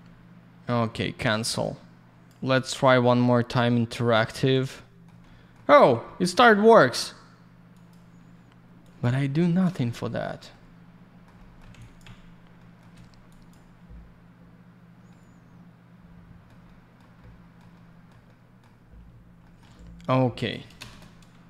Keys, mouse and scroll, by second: 1.6 click, 5.2 alt+middle click, 6.0 middle click, 7.7 click, 7.8 click, 8.8 click, 9.7 alt+shift+й, 11.2 alt+middle click, 11.3 middle click, 11.7 alt+я, 11.7 click, 12.5 middle click, 13.2 click, 15.0 alt+middle click, 16.6 middle click, 17.7 middle click, 18.2 alt+middle click, 19.4 middle click, 19.5 middle click, 20.3 click, 20.4 click, 20.7 ctrl+shift+space.